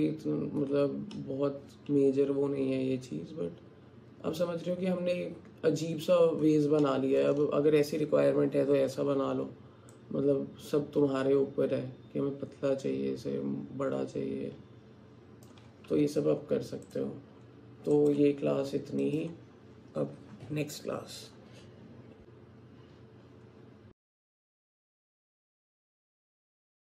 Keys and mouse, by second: 1.2-5.8 middle drag, 6.8 middle click, 10.1-15.6 drag, 16.3 Tab, 18.5 Tab.